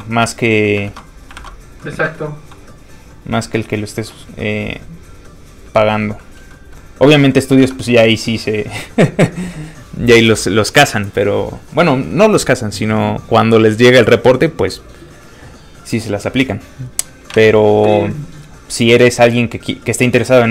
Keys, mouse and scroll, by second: 0.9 alt+Tab, 1.4 alt+Tab, 1.8 middle click, 1.8-2.8 scroll down 1, 2.8 click, 3.4 middle click, 4.1 g, 4.6 click, 6.0 scroll up 1, 6.2 middle click, 7.6 alt+Tab, 8.4 alt+click, 17.4 alt+Tab, 19.1 click.